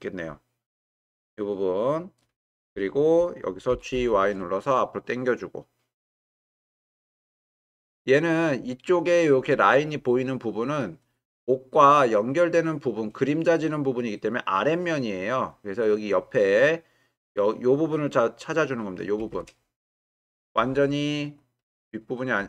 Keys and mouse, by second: 3.7 g, 3.9 y, 7.1 click, 20.3 click.